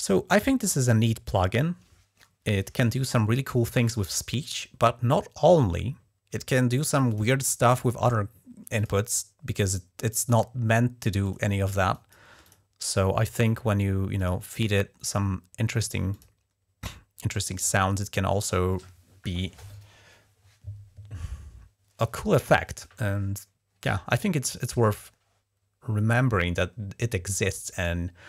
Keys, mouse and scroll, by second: 6.9 click, 8.5 click, 10.1 click, 11.0 click, 11.7 click, 12.2 click, 12.9 click, 14.0 click, 15.9 click, 27.6 click.